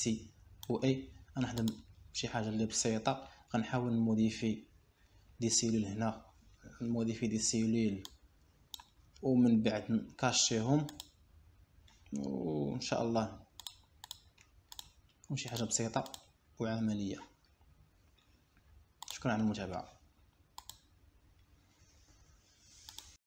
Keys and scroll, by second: 0.8 Escape, 11.7 Escape.